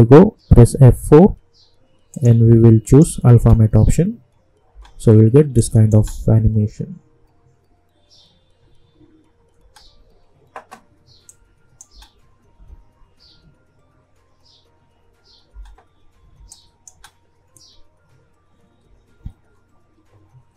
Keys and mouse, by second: 0.7 F4, 2.1 click, 3.3 space, 5.5 click, 5.9 space, 9.6 space, 11.2 click, 11.8 space, 15.4 space, 16.5 click, 16.9 space.